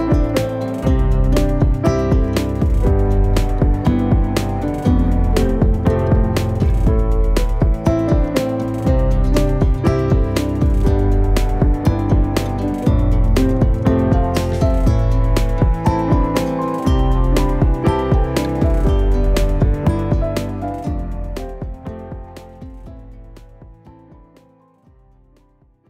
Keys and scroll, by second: 2.4 ctrl+space, 3.0 ctrl+space, 3.6 space.